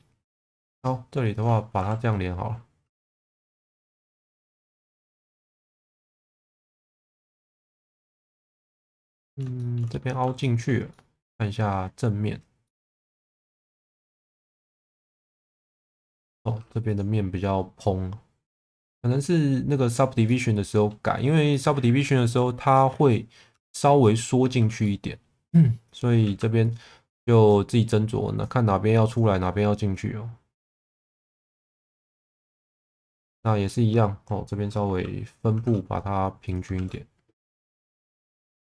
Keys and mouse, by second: 0.2 2, 0.6 click, 1.8 f, 3.6 middle click, 4.9-6.2 middle drag, 6.9 2, 8.1-9.4 middle drag, 9.6 shift+middle click, 10.4 shift+middle click, 10.9 middle click, 12.6 middle click, 14.3 click, 14.7 shift+middle click, 15.6 shift+middle click, 16.5 3, 19.0 click, 20.2 middle click, 21.6 middle click, 22.6 click, 23.1 middle click, 23.5 Tab, 24.0 middle click, 24.4 Tab, 24.8 middle click, 26.2 1, 27.5 click, 29.9 click, 31.1 shift+middle click, 31.5 middle click, 35.5 shift+v, 36.4 click, 36.7 shift+v, 37.4 click, 37.8 middle click.